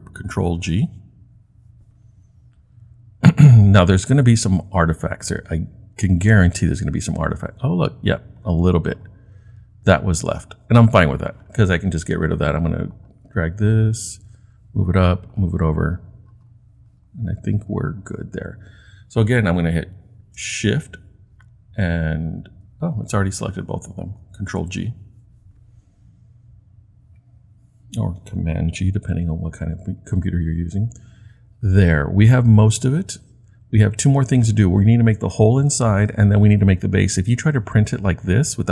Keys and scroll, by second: 0.6 super+g, 24.5 super+g.